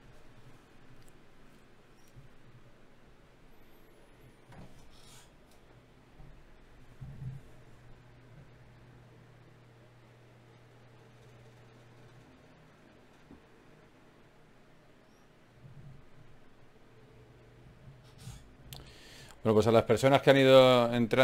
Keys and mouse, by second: 0.5 g, 2.0 g, 3.1 g, 4.7 g, 6.0 g, 6.6 middle click, 7.5 ctrl+Tab, 9.2 f, 10.0 f, 15.8 KP_Divide, 17.4 a, 17.8 a, 18.6 z.